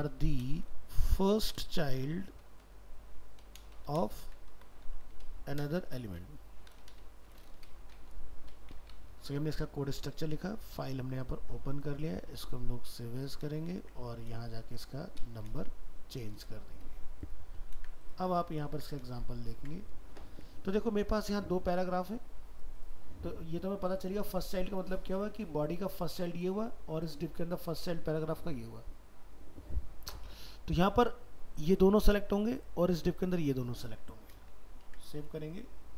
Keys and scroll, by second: 12.2 alt+移, 13.8 ctrl+Tab, 17.5 ctrl+a, 17.8 ctrl+c, 18.3 ctrl+a, 34.9 ctrl+s.